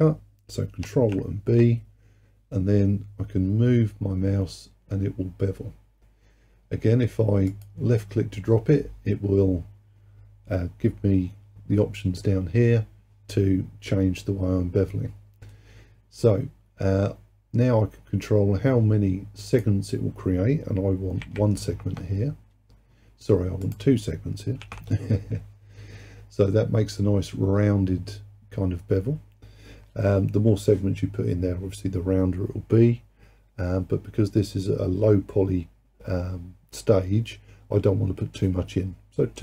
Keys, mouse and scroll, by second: 0.9 ctrl+b, 19.5-22.7 drag, 23.7-26.7 drag.